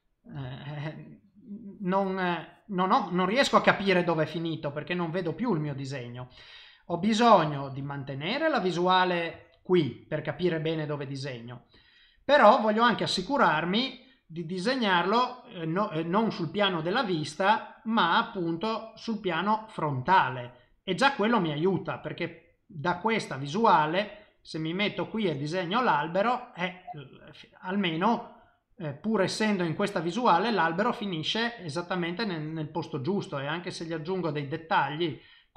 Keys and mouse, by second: 0.5 ctrl+z, 0.7 click, 1.6 click, 2.8 middle click, 4.2 middle click, 6.2 ctrl+z, 7.0 ctrl+z, 7.5 ctrl+z, 7.8 shift+middle click, 8.4 middle click, 9.4 shift+middle click, 16.4 click, 21.3 click, 22.9 click, 23.4 click, 24.6 click, 25.4 middle click, 27.6 typing, 27.9 middle click, 31.6 click, 32.1 middle click, 33.4 click, 34.1 middle click, 35.2 click.